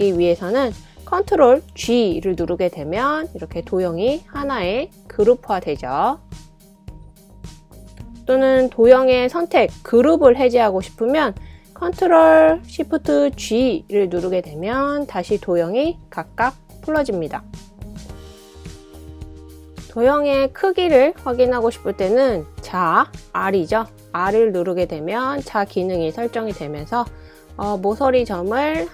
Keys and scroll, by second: 2.5 super+g, 14.4 ctrl+shift+super+g, 19.3 i, 20.6 r, 22.0-22.7 typing.